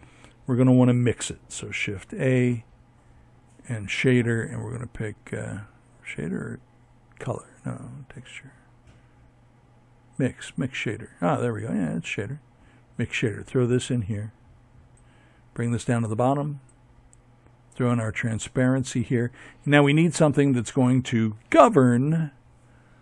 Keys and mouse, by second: 11.2-21.8 drag.